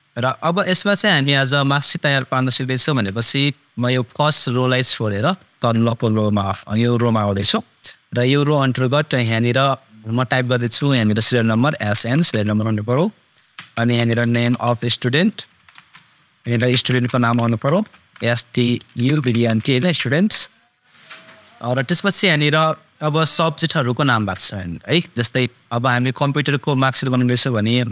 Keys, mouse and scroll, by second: 2.4 ctrl+super+scroll up 1, 4.1-7.0 super+drag, 10.9 super+click, 11.5 s, 12.1 shift+super+n, 12.7 super+Tab, 13.7 shift+super+n, 14.0 super+m, 14.2 super+space, 15.5 f, 15.7 super+space, 16.4 shift+super+s, 16.7 super+t, 16.8 super+u, 17.1 super+d, 17.3 super+e, 17.8 BackSpace, 19.0 super+u, 19.1 super+d, 19.2 super+b, 19.6 super+n, 19.7 super+t, 20.1 super+Tab, 21.6 click.